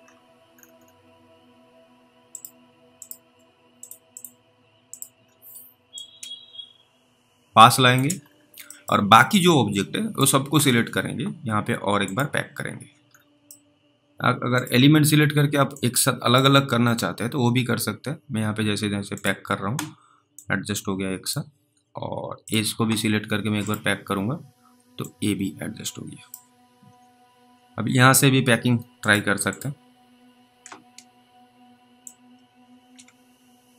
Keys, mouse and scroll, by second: 0.0 scroll up 1, 0.5 scroll down 1, 0.6-1.2 scroll down 2, 2.4 click, 5.2-5.6 scroll up 1, 6.2 click, 6.2 scroll up 1, 8.2-8.6 scroll down 3, 8.8 middle click, 9.6 click, 12.1 click, 13.0-13.4 scroll down 3, 14.6 click, 16.0 click, 19.2 click, 20.6 click, 22.4 click, 25.3 click, 29.1 click, 29.5 double click, 32.3 double click.